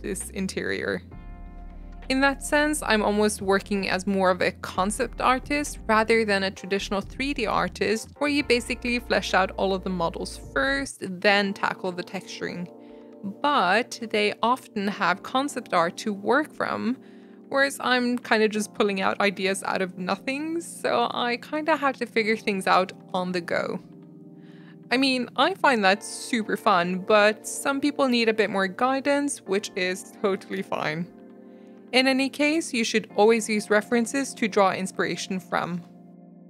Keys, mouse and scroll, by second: 0.0 click, 0.2 middle click, 0.9 g, 2.6 g, 3.6 scroll down 1, 3.7 Tab, 3.8 shift+middle click, 4.3 Tab, 4.4 ctrl+z, 4.6 ctrl+z, 4.8 ctrl+z, 6.5-7.9 drag, 8.3-11.1 drag, 11.7 shift+click, 11.7 shift+click, 11.9 shift+click, 12.0 shift+click, 12.6 u, 13.3 r, 14.3 g, 15.3 s, 15.9 g, 16.8 shift+middle click, 17.0 Tab, 17.2-17.5 shift+middle drag, 17.5 Tab, 18.1 click, 18.2 shift+middle click, 18.4 shift+click, 18.5 shift+click, 18.7 shift+click, 18.9 shift+click, 19.1 shift+click, 19.2 shift+click, 19.6-21.1 typing, 22.3 ctrl+m, 22.7 g, 23.2 s, 23.6 g, 24.0 Tab, 24.3 shift+middle click, 24.7 Tab, 24.8 g, 25.5 g, 26.1 Tab, 26.3 scroll down 1, 26.4 middle click, 26.6-27.0 scroll up 2, 26.7 middle drag, 27.0-28.2 shift+middle drag, 28.2 Tab, 28.4 middle click, 28.9 click, 29.2 middle click, 29.5 ctrl+click, 29.6 middle click, 30.0 ctrl+click, 30.3 u, 30.5 s, 31.1 g, 31.6 middle click, 31.8 Tab, 31.9 middle click, 32.4 Tab, 32.7 s, 33.4 click, 33.6 Tab, 34.1-34.9 middle drag, 35.2 click, 36.1 click, 36.3 middle click, 36.3 Tab.